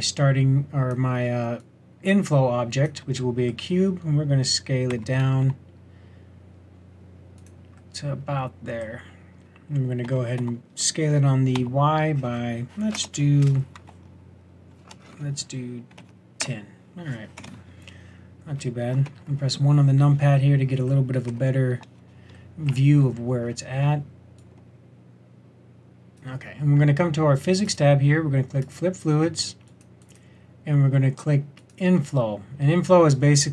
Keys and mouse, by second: 4.9 Tab, 5.4 s, 8.1 click, 10.0 s, 19.0 KP_1, 21.2 KP_1, 24.3-26.1 drag, 27.6-28.7 drag.